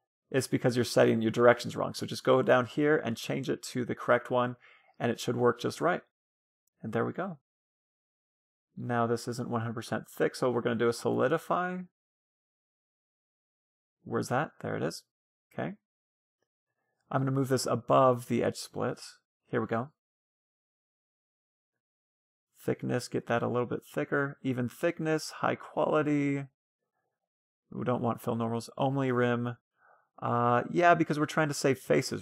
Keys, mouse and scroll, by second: 2.1-3.7 drag, 3.9-9.0 middle drag, 4.6 Tab, 10.1-11.7 drag, 14.4-18.6 middle drag, 18.6 scroll up 1, 18.8-20.3 drag, 19.7-21.3 middle drag, 21.4-23.0 drag, 23.3-29.9 drag, 28.8-30.4 middle drag.